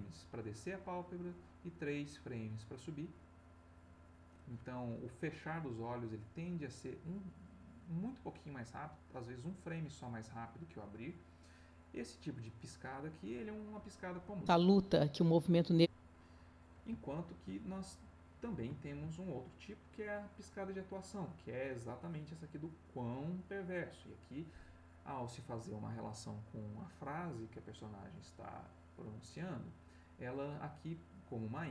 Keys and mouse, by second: 14.1 space, 15.5 Escape, 16.7 ctrl+middle click, 18.1 ctrl+middle click, 18.7 ctrl+middle click, 19.2 ctrl+middle click, 22.0-25.4 drag, 31.5-31.7 drag.